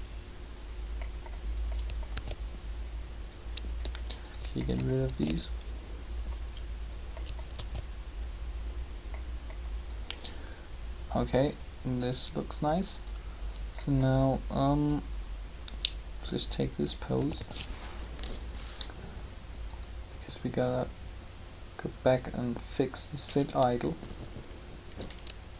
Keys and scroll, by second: 2.0 alt+a, 5.0 alt+a, 7.4 alt+a, 17.2 a, 17.3 a, 23.8 Down.